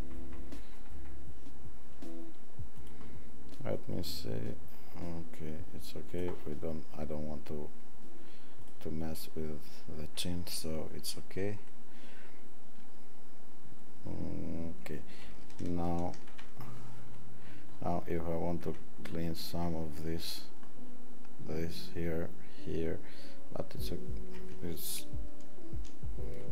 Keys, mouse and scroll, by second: 17.1-17.9 alt+scroll up 15, 18.3-26.5 middle drag, 18.3 alt+scroll, 19.1 alt+scroll.